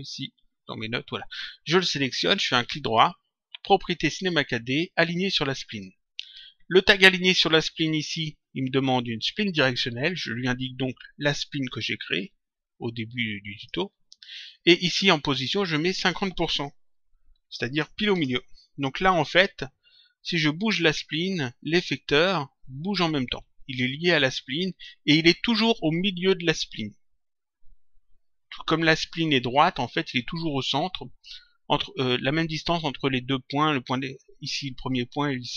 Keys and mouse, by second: 1.5 click, 2.8 right click, 5.6 click, 11.6 click, 15.7 click, 18.1 Return, 20.1 click, 21.6 click.